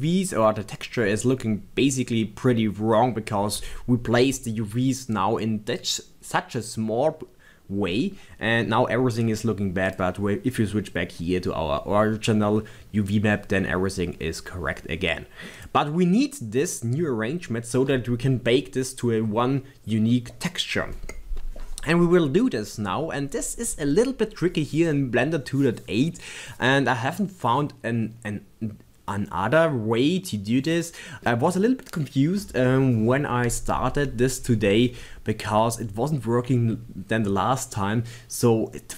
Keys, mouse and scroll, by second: 0.1-2.7 middle drag, 6.8-9.8 middle drag, 9.9 click.